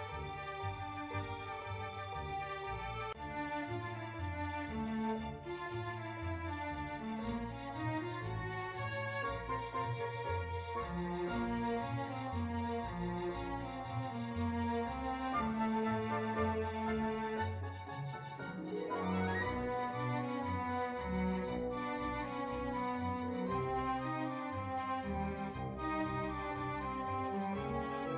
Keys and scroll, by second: 24.6-25.2 typing.